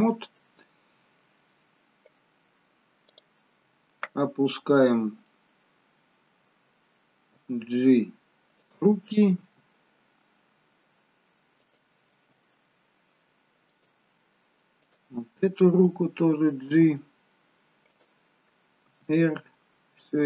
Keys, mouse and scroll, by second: 0.3 middle click, 0.3 scroll up 4, 3.0 click, 4.1-5.3 scroll down 1, 5.3 middle click, 5.3-6.1 scroll down 4, 7.9 g, 16.8 click.